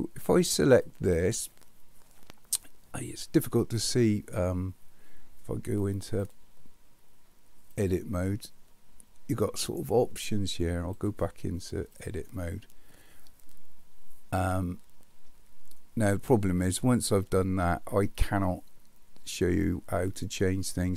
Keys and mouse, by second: 6.2 click, 10.9-12.1 drag.